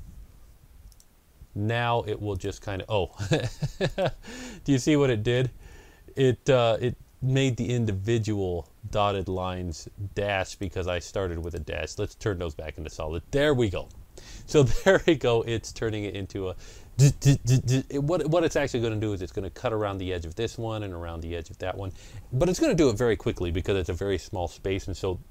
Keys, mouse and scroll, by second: 0.8 click, 2.2 click, 3.7 click, 5.1 ctrl+scroll up 1, 6.0 ctrl+scroll down 1, 8.4 ctrl+scroll down 1, 9.0 scroll up 1, 10.4 click, 11.3 click.